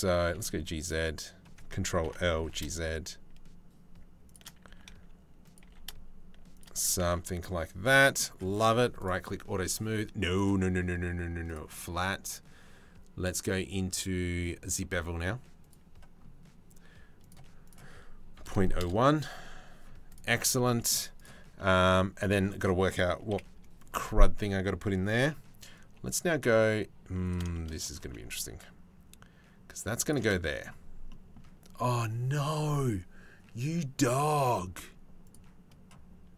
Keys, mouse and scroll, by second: 1.6 ctrl+l, 1.9 g, 4.3 s, 5.2 g, 6.6 Tab, 7.4 middle click, 8.2 click, 9.9-11.2 drag, 11.9-15.4 drag, 15.8 middle click, 17.3-19.4 drag, 19.4 middle click, 20.2 click, 21.2 click, 21.3 middle click, 22.9 KP_7, 25.4 g, 27.2 shift+middle click, 27.7 g, 30.7 shift+right click, 31.0 shift+middle click, 34.1 click.